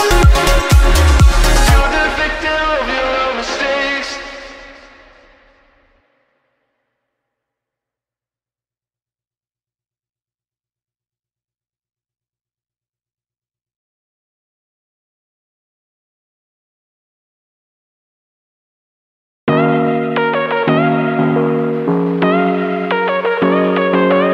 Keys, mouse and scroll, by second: 0.3-0.7 scroll down 4, 0.7 Tab, 1.3 click, 1.5-2.6 scroll up 4, 2.6 click, 2.9-3.8 middle drag, 3.8-4.3 scroll down 9, 4.3 middle drag, 4.6-5.2 scroll up 8, 5.2-6.5 middle drag, 6.5-6.8 scroll down 3, 6.8 middle drag, 7.1 scroll up 1, 7.3-7.8 scroll down 10, 7.9-8.9 middle drag, 8.9 click, 9.6 click, 12.1 r, 15.8-17.1 scroll up 5, 17.9-24.3 scroll up 1.